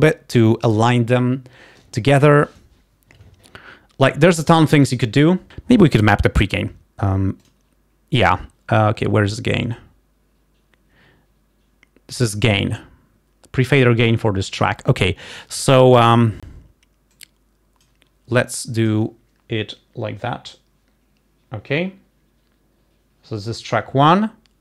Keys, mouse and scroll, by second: 7.5 click, 17.5 click, 18.6 click.